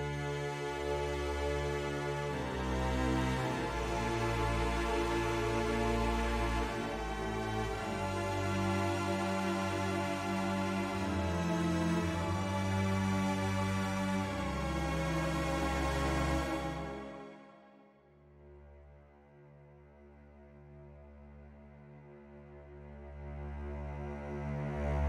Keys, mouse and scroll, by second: 0.9 click, 1.4 click, 2.6 click, 2.9-5.2 drag, 5.9 click, 8.4 Tab, 9.3 middle click, 14.3 click, 15.3 alt+shift+click, 16.5 ctrl+KP_Add, 16.7 ctrl+KP_Add, 16.8 ctrl+KP_Add, 17.0 ctrl+KP_Add, 17.1 ctrl+KP_Add, 17.5 ctrl+KP_Add, 17.8 ctrl+KP_Add, 18.0 ctrl+KP_Add, 18.4 ctrl+KP_Add, 19.4 ctrl+KP_Add, 20.3 ctrl+KP_Subtract, 21.5 s, 24.8 click.